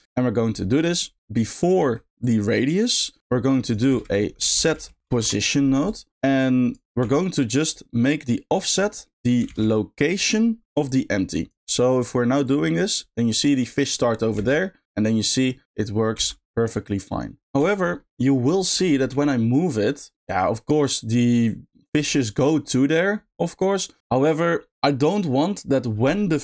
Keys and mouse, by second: 0.0 middle click, 1.2 click, 3.2 middle drag, 3.6 click, 3.9 shift+a, 6.4 click, 8.8 middle click, 9.2 click, 9.4 shift+d, 10.8 click, 12.4 click, 14.3 space, 16.1 g, 17.7 shift+middle click, 18.1 middle drag, 18.5 shift+middle click, 18.8 middle click, 20.2 click.